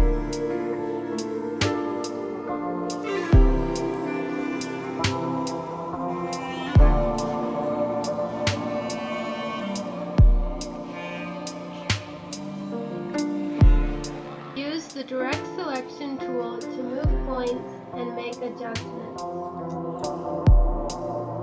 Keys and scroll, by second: 0.6 Right, 1.0 space, 2.0 space, 4.0 space, 4.3 space, 4.6 space, 5.8 space, 6.0 space, 10.7 space, 11.2 space, 11.4 space, 14.9 space, 16.0 ctrl+z, 16.4 space, 16.6 space, 19.2 space, 19.8 space.